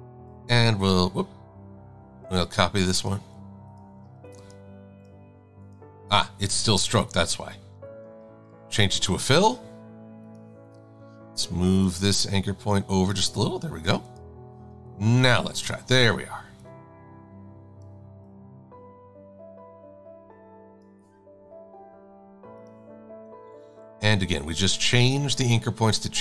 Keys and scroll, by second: 8.2 shift+x.